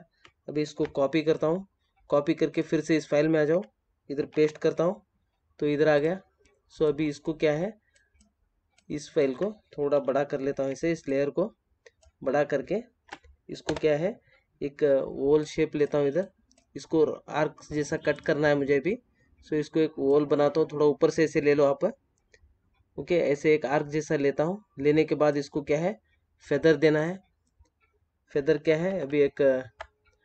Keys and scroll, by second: 0.6 ctrl+c, 4.3 ctrl+v, 9.9 ctrl+t, 28.5 Up.